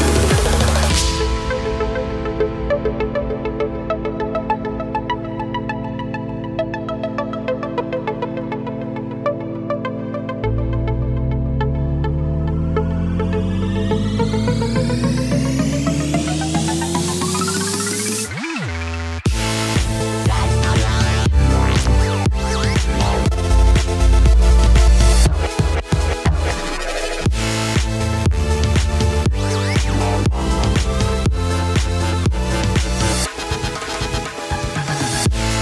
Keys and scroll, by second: 11.1 i, 13.5 typing, 17.1-17.9 typing, 19.0 ctrl+=.